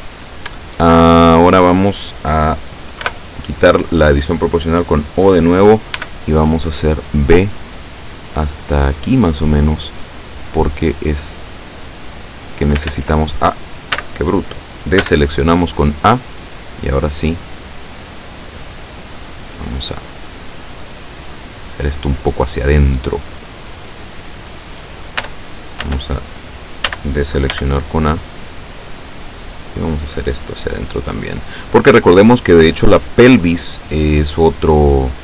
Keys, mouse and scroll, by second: 3.1 o, 6.0 b, 7.1-9.2 drag, 10.1-12.9 drag, 12.9 ctrl+z, 14.0 a, 15.1 b, 15.8-17.8 drag, 18.5-22.7 drag, 25.3 Tab, 25.9 Tab, 27.0 a, 27.6 b, 27.8-28.8 drag, 29.2-31.7 drag.